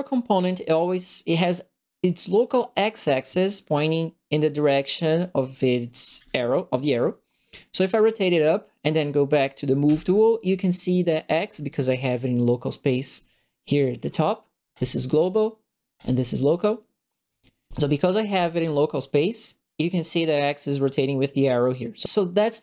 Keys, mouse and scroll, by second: 4.6 click, 6.1 e, 7.3-8.4 drag, 9.8 w, 14.7 click, 15.9 click.